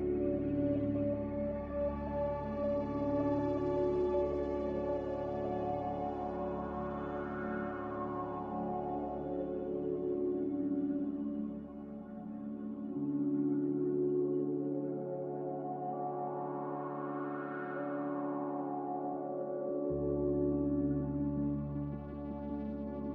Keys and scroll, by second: 4.2 ctrl+z, 7.4 ctrl+z, 7.9 ctrl+z, 8.4 ctrl+z.